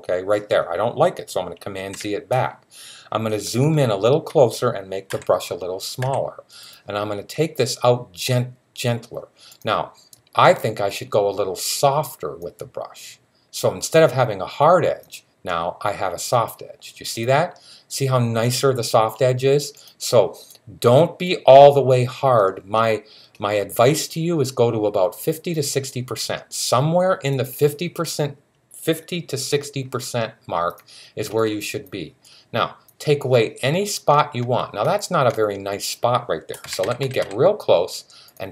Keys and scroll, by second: 1.6 super+z, 4.9 [, 5.8 [, 36.5-37.0 typing.